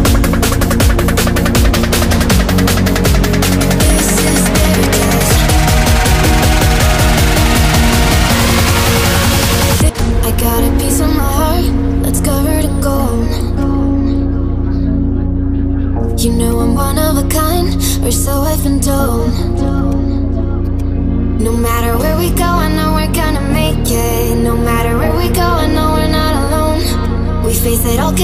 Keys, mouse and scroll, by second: 0.9 click, 1.4-9.3 alt+drag, 9.3 click, 12.9 ctrl+z, 13.5 click, 16.4 click, 21.9-23.6 typing, 26.9 click, 27.0 click.